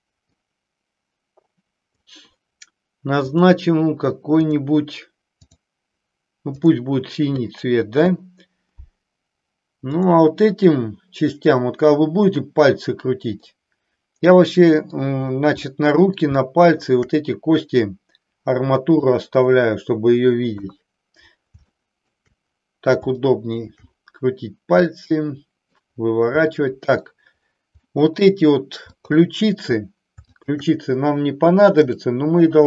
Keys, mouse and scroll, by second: 0.3-2.1 drag, 3.3 click, 5.5 click, 10.0 click, 13.6-15.1 middle drag, 15.7 middle click, 16.4 shift+middle click, 19.1 middle click, 20.5 KP_3, 21.8 shift+middle click, 23.2 shift+middle click, 24.8-25.8 middle drag, 26.5 middle click, 28.0 middle click, 29.0-29.6 drag, 30.2-31.1 shift+drag, 31.8-32.6 drag.